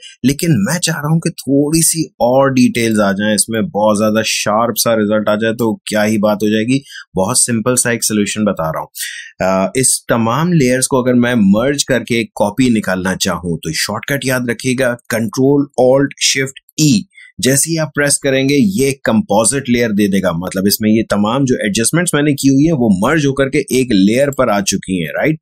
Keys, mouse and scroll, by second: 17.7 ctrl+alt+shift+e, 24.2 click.